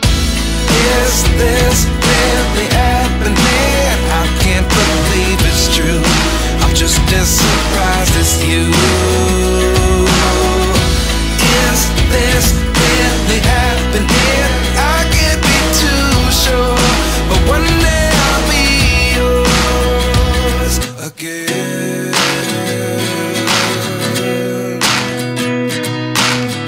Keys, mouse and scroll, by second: 1.3 right click, 6.9 typing, 11.5 double click, 14.0 typing, 14.5 double click, 17.0 typing, 17.6 double click, 18.6-20.0 typing, 19.2 double click, 20.4 double click.